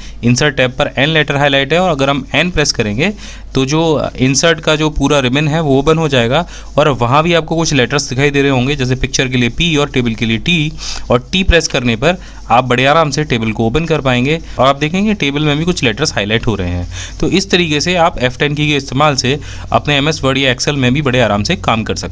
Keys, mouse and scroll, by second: 0.7 F10.